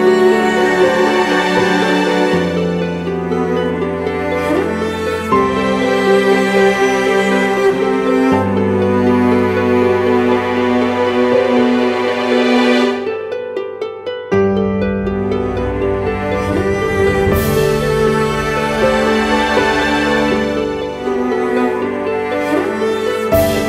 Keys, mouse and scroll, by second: 2.6 ], 9.3-9.6 scroll up 1, 10.2 ], 20.3 ctrl+t, 21.5 alt+shift+click.